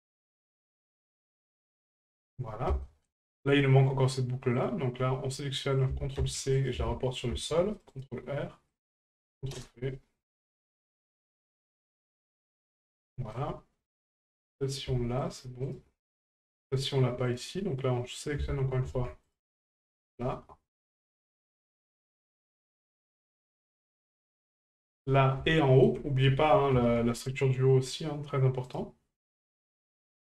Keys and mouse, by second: 0.3 right click, 0.9 shift+right click, 1.3 shift+right click, 2.8 shift+middle click, 4.6 right click, 5.9 ctrl+click, 8.7 ctrl+click, 10.8 right click, 11.4 shift+right click, 11.9 shift+right click, 13.1 shift+middle click, 14.6 right click, 15.2 shift+right click, 15.6 shift+right click, 17.3 right click, 18.3-19.4 ctrl+drag, 22.6 click, 23.5-24.8 drag, 25.6 shift+middle drag, 30.1-30.3 ctrl+drag.